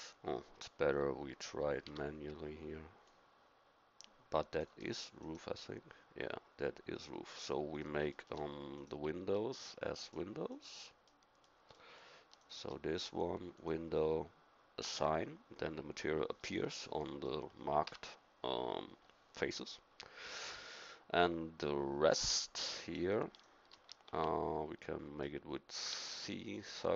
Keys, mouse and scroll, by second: 1.9 c, 7.4-8.8 middle drag, 8.8-11.3 drag, 11.3-13.6 middle drag, 16.5 middle click, 17.9 a, 24.1 x, 26.0 c.